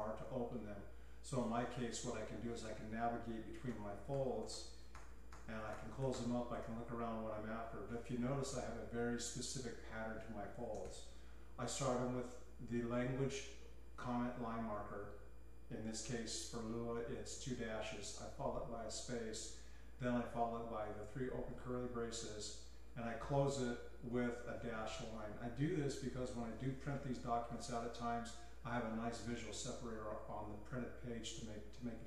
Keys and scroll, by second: 1.4 typing, 3.3-7.1 typing, 10.5-11.3 typing, 23.1 l.